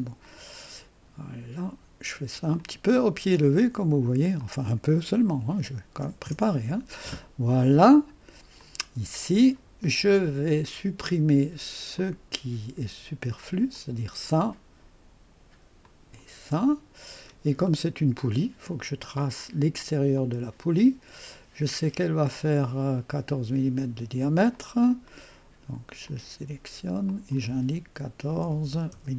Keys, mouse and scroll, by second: 0.2 click, 1.0-1.7 typing, 1.2 click, 2.6 click, 4.4-6.2 typing, 4.4 click, 8.6-9.8 drag, 12.0 click, 13.7 click, 15.8 click, 16.7-17.4 scroll down 1, 20.1 click, 22.9 click, 24.5 click, 25.1 middle click, 26.1 click, 27.1 click, 28.2-29.1 typing.